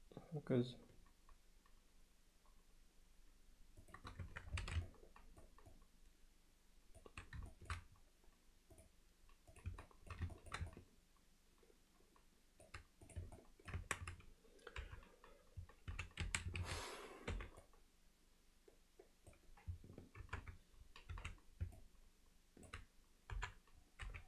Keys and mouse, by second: 4.3 Tab, 4.9-5.4 alt+middle drag, 5.7-7.0 middle drag, 9.6 click, 9.8 middle click, 10.4 ctrl+alt+middle click, 10.7-12.7 middle drag, 13.1 click, 13.4-13.7 alt+middle drag, 13.8 Tab, 14.8 KP_3, 15.9 z, 16.3 a, 17.3 b, 20.3 ctrl+KP_Add, 21.1 z, 21.8-22.7 alt+middle drag, 23.4 KP_7, 24.1 z.